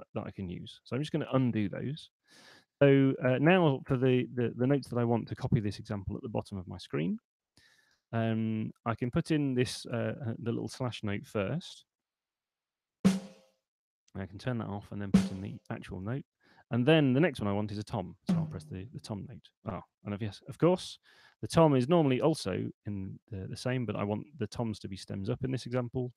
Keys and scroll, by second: 0.9 super+z, 7.7 /, 14.2 /, 21.2 Return.